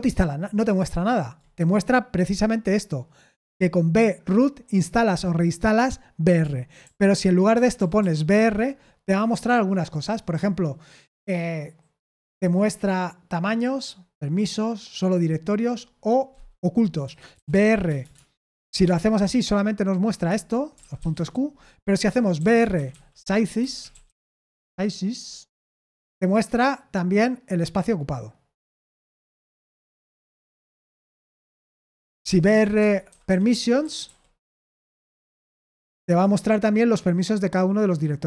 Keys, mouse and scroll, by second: 6.8 ctrl+p, 7.5 BackSpace, 7.7 BackSpace, 7.9 BackSpace, 8.2 BackSpace, 16.7-18.5 typing, 18.8 Return, 20.2 Escape, 20.8-25.1 typing, 31.2 ctrl+q, 32.0-36.1 typing.